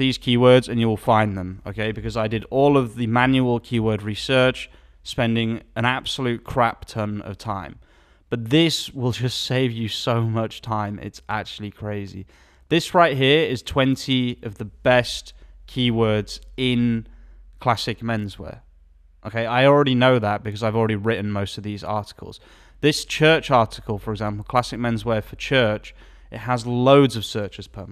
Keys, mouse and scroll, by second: 12.6 alt+a, 12.6 click, 23.1 alt+a, 23.1-27.9 drag.